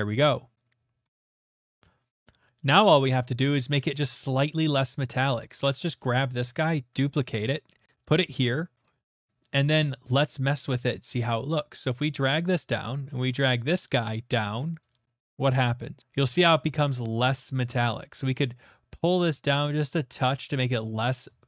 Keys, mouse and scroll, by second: 0.2-0.7 scroll, 0.7 scroll, 2.6-3.0 scroll, 3.6-4.2 scroll, 4.5-5.2 scroll, 5.2 click, 5.6 middle click, 5.6 click, 6.0 middle click, 6.8 d, 7.5 click, 10.3 click, 10.8 click, 12.3 click, 12.7 click, 14.1 click, 14.9 click, 20.2 click, 20.6 click, 20.9 middle click.